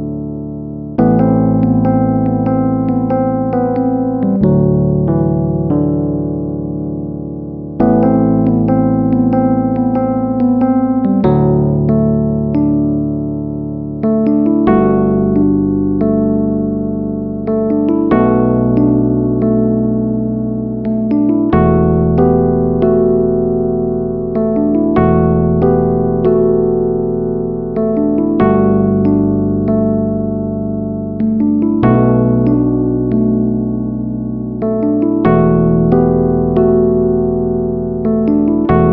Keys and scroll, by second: 6.9 ctrl+alt+shift+n.